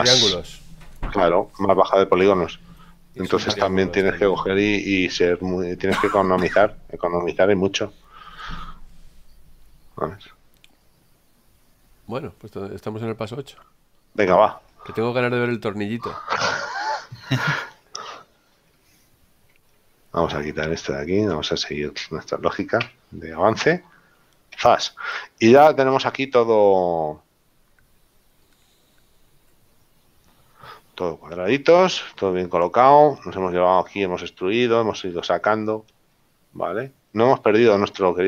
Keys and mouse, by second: 15.8 click, 21.2 click, 23.2 KP_Decimal, 24.9 Tab, 29.2 click, 29.9 click, 31.3 middle click, 35.6 shift+middle click, 37.9 right click.